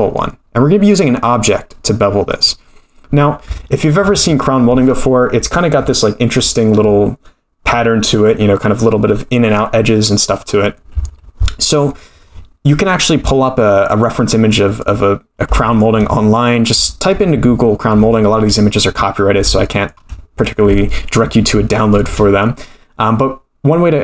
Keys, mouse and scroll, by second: 0.8 click, 3.6-3.9 shift+middle drag, 12.9-13.6 scroll down 4, 13.6-14.0 middle drag, 14.5 middle drag, 14.8-15.2 scroll up 1, 15.6 shift+middle drag, 17.7 scroll down 3, 18.1 shift+middle drag, 19.6 shift+middle drag, 21.9 shift+a.